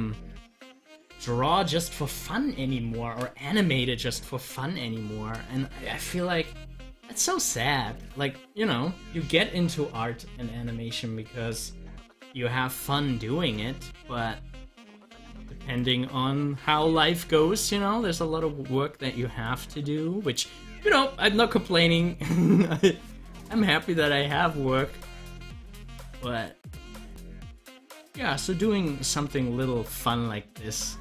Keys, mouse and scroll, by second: 6.5 click, 11.3 click, 12.9 click, 14.6 scroll up 1, 17.0 Delete, 19.4 click, 20.6 Delete, 21.8 click, 22.3 Delete, 26.4-31.0 drag.